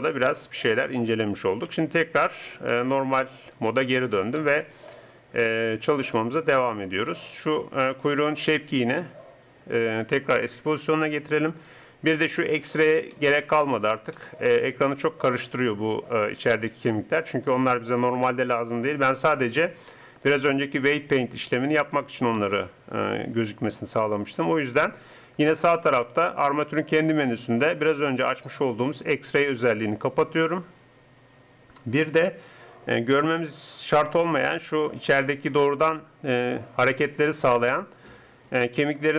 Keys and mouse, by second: 1.9 ctrl+Tab, 6.2-7.7 middle drag, 18.0 middle click.